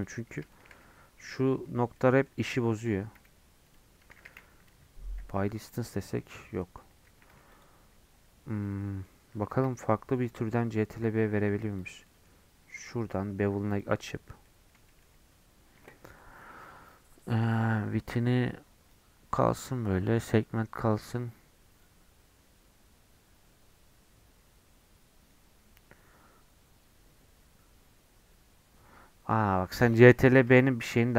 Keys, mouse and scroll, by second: 0.2 scroll up 3, 0.5 shift+middle click, 1.3 1, 1.9 middle click, 2.7 click, 3.1 g, 4.1 a, 4.6 m, 6.3 Tab, 6.6 middle click, 6.9 Tab, 7.0 2, 7.5 alt+click, 8.4 scroll down 3, 8.6 middle click, 9.5 ctrl+b, 12.0 middle click, 12.5 scroll up 1, 13.7 click, 14.2 scroll up 1, 14.4 middle click, 15.1 scroll up 1, 17.2-20.2 drag, 21.8-28.9 drag, 28.9-29.6 scroll down 5, 30.2 ctrl+z, 31.0 Tab.